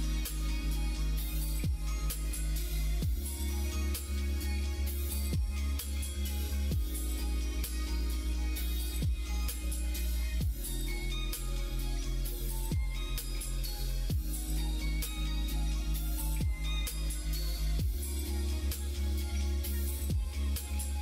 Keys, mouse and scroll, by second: 6.4 click, 7.6 ctrl+z, 8.3 middle click, 9.2 g, 13.6 ctrl+z, 14.0-16.5 middle drag, 17.0 middle click, 17.9 middle click, 18.9-21.0 middle drag.